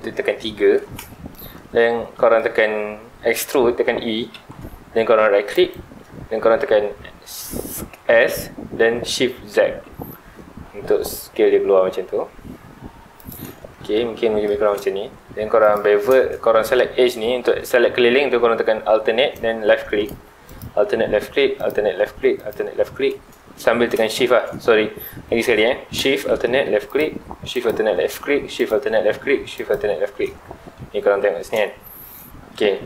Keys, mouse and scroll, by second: 1.1-4.2 shift+middle drag, 4.3 e, 5.7 right click, 7.7 s, 13.3 shift+click, 13.6-14.6 middle drag, 14.6 scroll up 1, 15.1 2, 15.6 alt+click, 20.4 alt+shift+click, 21.6 alt+shift+click, 22.3 alt+shift+click, 24.1-25.4 shift+middle drag, 25.4 alt+a, 26.9 alt+shift+click, 27.5 alt+shift+click, 28.5 alt+shift+click, 29.5 alt+shift+click, 31.6-32.8 shift+middle drag.